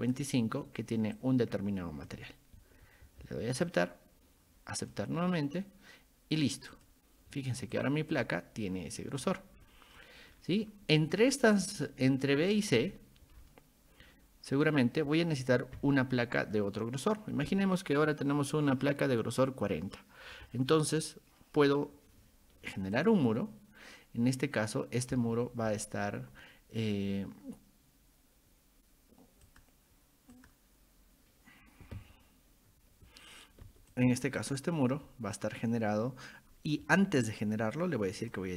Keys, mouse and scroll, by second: 1.2 ctrl+click, 3.7 click, 4.9 click, 6.7 click, 7.7 click, 8.1 click, 9.2 scroll down 2, 9.6-10.0 scroll up 2, 10.3-10.7 scroll up 2, 11.0-11.7 scroll up 2, 12.5 click, 13.4 scroll down 2, 14.5 click, 15.4 click, 15.8-16.6 scroll up 4, 16.3 middle drag, 23.0 click, 29.5 click, 30.3 click, 33.9 click, 34.4 click, 38.2 click.